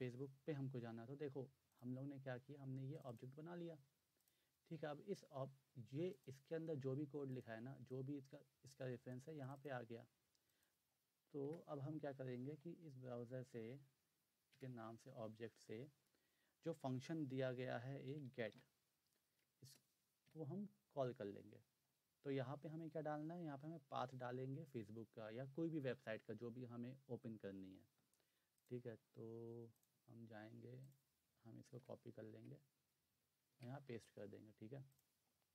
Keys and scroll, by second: 11.4 Return, 12.2-13.5 typing, 14.6 Return, 15.2 ., 17.8-18.6 typing, 19.6-20.2 typing, 31.6 ctrl+c, 32.2 alt+Tab, 33.4 ctrl+v.